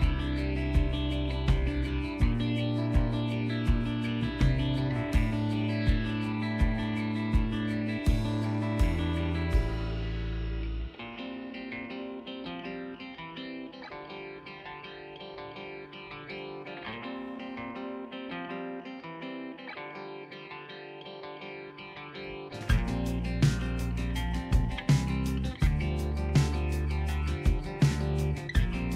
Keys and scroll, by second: 20.1 ctrl+alt+z.